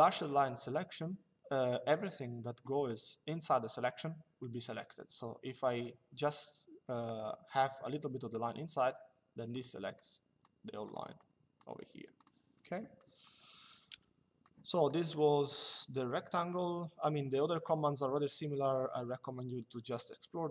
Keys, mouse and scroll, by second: 9.2 click, 13.6 Delete, 14.2 click, 14.7 Delete, 15.4 click.